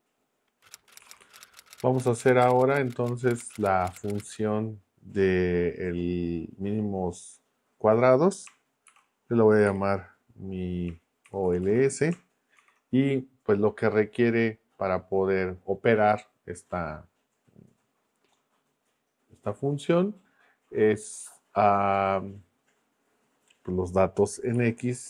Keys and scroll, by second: 9.7 y, 11.0-12.6 typing, 24.5 x.